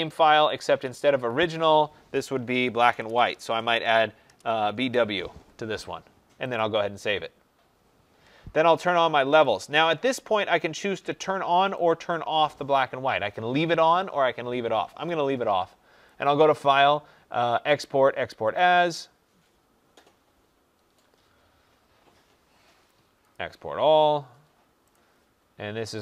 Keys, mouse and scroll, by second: 0.4 click, 1.4 click, 2.3 Right, 2.7-4.7 typing, 6.5 click, 9.1-9.8 typing, 9.3 click, 10.7 click, 11.8 click, 16.1 click, 23.2 click, 25.9 click.